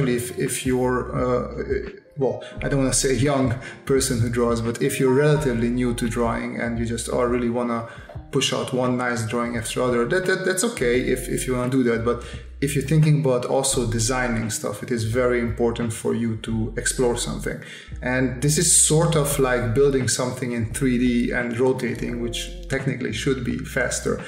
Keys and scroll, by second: 1.9 space, 9.5 space, 12.7 space, 15.6 space, 20.1 space, 21.7 space, 23.9 space.